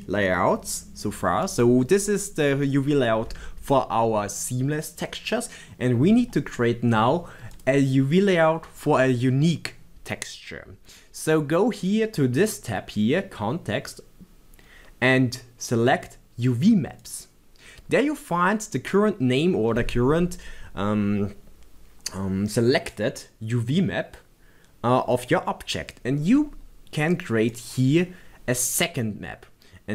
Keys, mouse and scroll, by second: 7.5 click, 10.2 click, 17.0 click, 27.5 click.